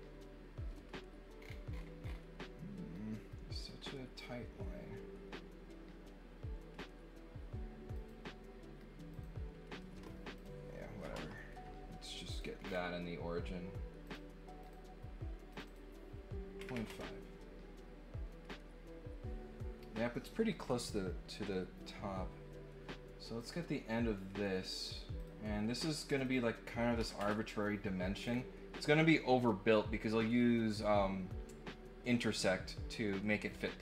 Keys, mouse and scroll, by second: 1.3 scroll down 2, 1.7-2.1 scroll up 4, 7.9 click, 9.1 click, 10.3 click, 12.3 click, 12.6 middle click, 12.6 scroll down 1, 14.0 click, 14.6 click, 15.5 click, 15.6 click, 23.3 click, 24.7 click, 25.1 click, 26.1 click, 26.2 click, 28.1 scroll down 1.